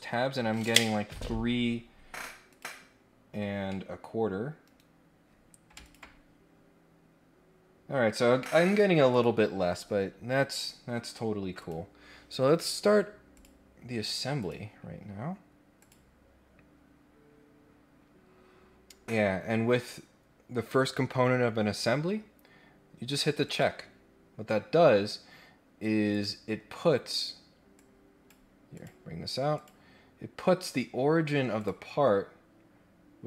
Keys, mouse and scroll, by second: 2.5 click, 2.9-3.2 scroll down 3, 3.2-3.6 scroll up 3, 3.6 middle click, 3.7 scroll down 2, 5.8 ctrl+click, 8.5-9.1 scroll down 2, 9.1 click, 11.3 scroll down 1, 11.6 click, 13.3 click, 14.4 click, 15.7 click, 23.4 click, 26.1 click, 27.7 click, 28.7 click, 29.5 click, 31.5 click, 32.5 scroll up 1.